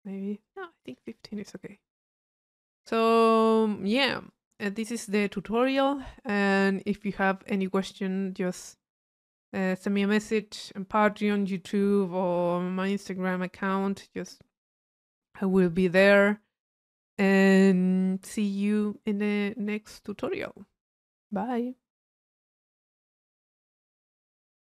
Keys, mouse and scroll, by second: 0.4-1.6 drag, 1.7 click, 2.0 middle click, 2.5-4.2 drag, 4.3 click.